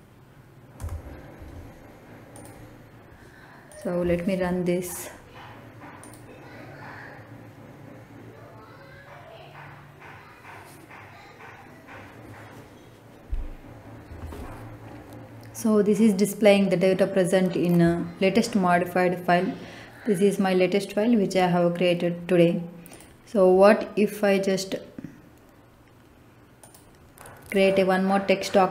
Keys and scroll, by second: 0.6 Return.